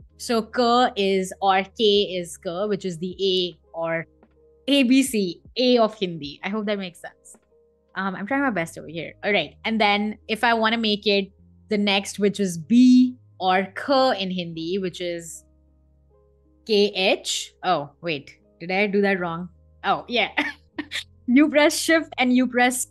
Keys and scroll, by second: 2.9 Escape, 7.6 BackSpace, 15.9 k, 16.6 h, 17.2 BackSpace, 19.0 shift+k, 19.7 BackSpace, 21.7 shift+k.